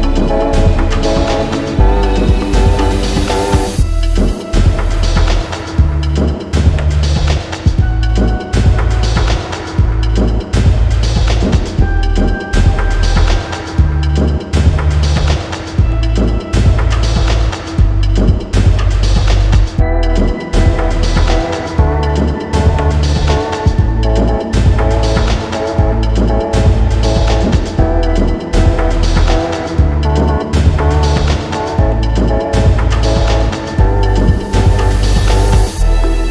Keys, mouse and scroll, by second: 0.0 click, 0.8 click, 1.4-2.5 scroll up 10, 3.1-4.5 scroll up 11, 6.5 shift+click, 8.6 click, 9.6-10.8 drag, 11.2 click, 12.0 click, 12.2-12.9 scroll up 2, 13.1 Return, 14.9 click, 16.0 click, 16.2 ctrl+z, 17.6 click, 18.4 click, 19.4-20.7 drag, 22.1 click, 22.4-22.9 scroll, 23.6-24.1 scroll down 3, 23.9 ctrl+t, 24.1 middle click, 25.6 click, 25.9 Return, 29.2 click, 29.9 click, 30.4-32.0 typing, 32.6 click, 33.3 click, 34.3 click, 35.1-36.3 drag, 35.9 ctrl+t.